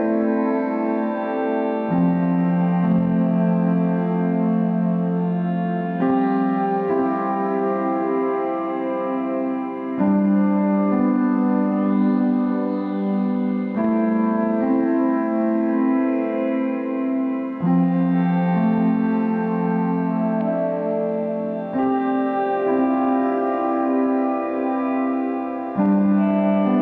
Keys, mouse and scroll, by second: 2.0-7.7 middle drag, 7.7-15.6 drag, 21.1-23.2 middle drag, 23.2-26.8 drag.